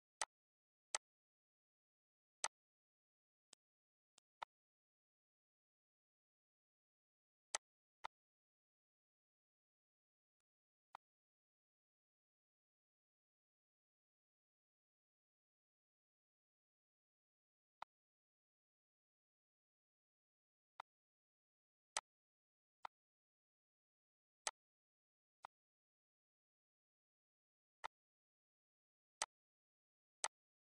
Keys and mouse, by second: 0.0 click, 0.7 click, 2.2 click, 3.3 click, 3.9 click, 7.3 click, 10.1 click, 17.6 click, 20.5 click, 21.7 click, 22.6 click, 24.2 click, 25.2 click, 27.6 click, 29.0 click, 30.0 click, 30.6 click.